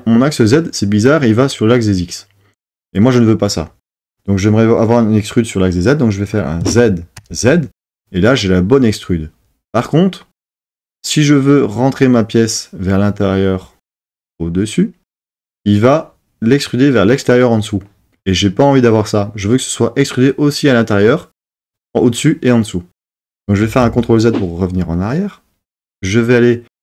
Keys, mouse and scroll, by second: 23.8 super+z.